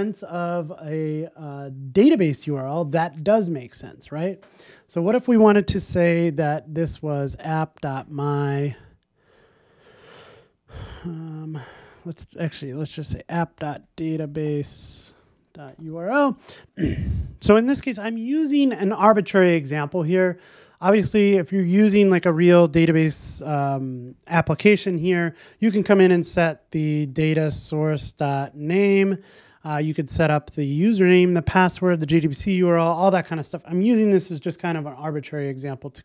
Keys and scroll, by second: 32.3 shift+super+Up.